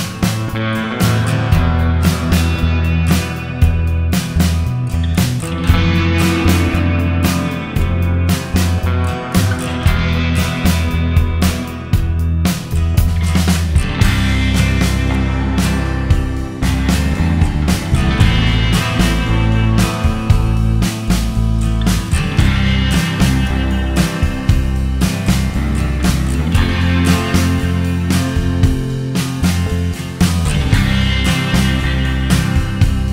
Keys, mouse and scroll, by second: 0.3 middle click, 0.7 middle click, 1.4-1.8 scroll up 2, 1.7 middle click, 2.1-2.7 scroll down 2, 3.2 click, 4.7 click, 6.0 click, 7.8 right click, 8.7 click, 9.1 right click, 10.3 click, 11.8 click, 12.3-13.2 scroll down 6, 13.3 scroll up 1, 13.5 middle click, 14.0 shift+middle click, 14.0 shift+scroll up 1, 14.7 click, 19.0-19.5 scroll down 5, 19.5 click, 20.1 scroll down 2, 20.7 shift+middle click, 20.9 scroll up 1, 22.7 click, 23.1 click, 23.4 click, 24.2 click, 24.5 click, 24.9 click, 25.2-26.1 scroll up 5, 25.6 middle click, 26.6 right click, 27.4 click, 27.7 click, 28.0 click, 28.9-29.5 scroll up 4, 29.5 middle click, 30.0-30.4 scroll down 1, 30.4 shift+middle click, 30.7 scroll up 1, 31.0 right click, 31.9 click, 32.1-32.5 click, 32.3 click, 32.5 click, 32.9 click.